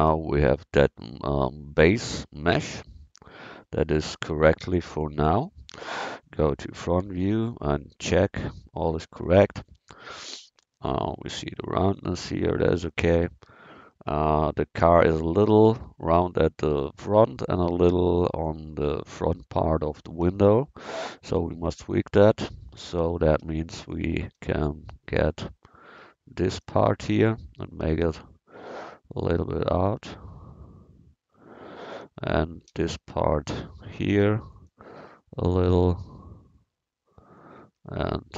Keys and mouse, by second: 6.2 KP_1, 21.5 Tab, 22.7 a, 23.4 v, 24.4 c, 26.6-31.6 drag, 32.0 a, 32.7 v, 33.6 c, 37.6 a, 37.9 c.